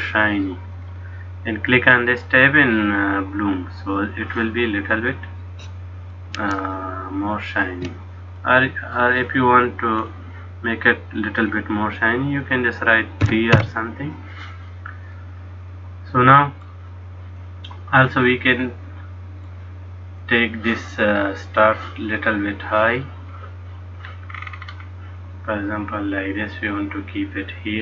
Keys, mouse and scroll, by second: 0.9 click, 3.4 click, 5.0 middle click, 6.8 shift+middle click, 8.5 middle click, 10.1 click, 11.5 click, 15.2 middle click, 18.0 click, 18.7 middle click, 20.2 click, 22.7 click, 24.5-25.8 scroll down 7, 25.8-26.1 scroll down 1, 26.1 click.